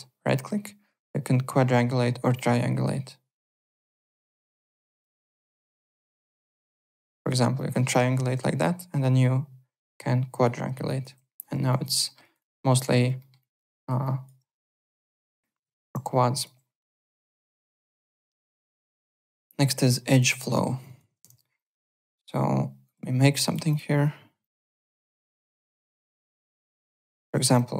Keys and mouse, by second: 4.6 alt+click, 5.1 shift+right click, 6.7 alt+click, 7.5 alt+click, 8.6 shift+right click, 10.8 alt+click, 11.7 alt+click, 12.0 alt+middle click, 12.2 alt+right click, 12.3 alt+click, 13.1 alt+middle click, 13.4 alt+click, 13.7 alt+right click, 14.0 alt+click, 15.6 alt+Tab, 16.3 alt+click, 19.8 click, 20.1 alt+click, 20.3 alt+right click, 20.5 alt+middle click, 20.8 alt+click, 21.1 alt+w, 21.3 3, 21.5 click, 21.8 alt+middle click, 22.8 click, 23.4 click, 24.4 click, 25.5 click, 26.0 alt+right click, 26.4 alt+click, 26.6 alt+middle click, 26.8-27.7 typing, 26.9 alt+right click, 27.4 click.